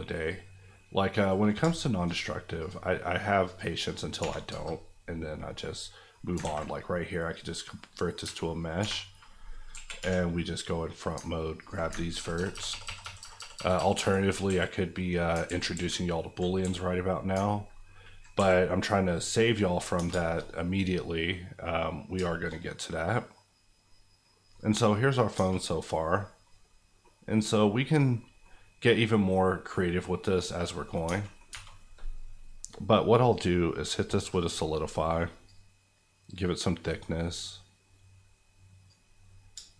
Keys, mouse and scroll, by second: 4.2 2, 4.5 KP_Enter, 6.1 middle click, 6.4 ctrl+a, 7.3 click, 7.7 middle click, 8.2 Tab, 8.4 scroll up 1, 8.8 2, 9.7 KP_1, 10.0 1, 10.6 middle click, 11.6 alt+click, 12.1 ctrl+KP_6, 12.3 ctrl+KP_Add, 14.4 KP_Add, 14.4 KP_1, 15.2 scroll down 2, 15.4 ctrl+z, 16.4 z, 16.6 x, 17.4 ctrl+x, 18.3 x, 19.1 click, 19.5 middle click, 19.9 Tab, 20.4 shift+middle click, 20.4 scroll up 1, 20.7 middle click, 22.6 shift+middle click, 22.6 scroll down 1, 22.9-24.2 middle drag, 24.2 scroll down 1, 24.5 middle click, 25.3 Tab, 25.6-27.0 middle drag, 31.0 Tab, 33.2 click.